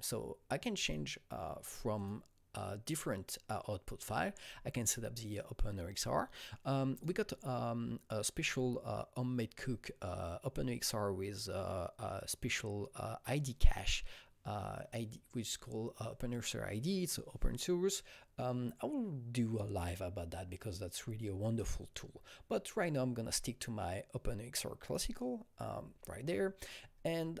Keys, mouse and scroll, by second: 0.8 click, 1.9 click, 6.3 click, 6.3 click, 6.9 click, 24.8 click, 25.8-26.7 scroll down 8, 26.7-27.4 scroll up 1.